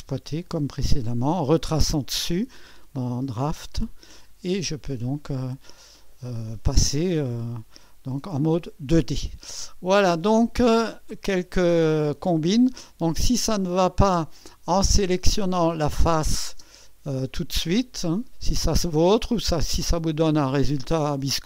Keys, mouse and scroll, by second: 0.0-2.4 typing, 1.4-1.9 scroll up 1, 2.0-3.7 right drag, 9.6 click, 16.2-17.3 drag, 16.5 space, 17.5-19.2 drag.